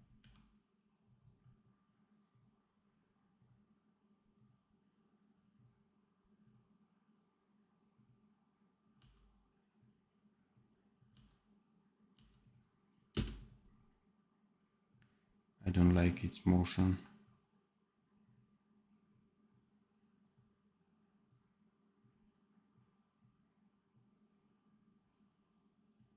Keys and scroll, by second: 0.1 d, 8.9 d, 11.1 d, 12.1 d, 13.0 space.